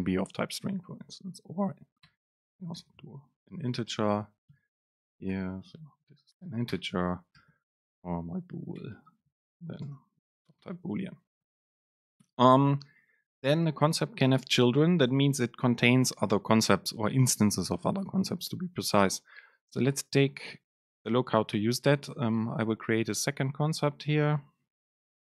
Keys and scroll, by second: 2.3 Return, 5.0 super+space, 8.9 BackSpace, 10.0 super+space, 11.0 Down.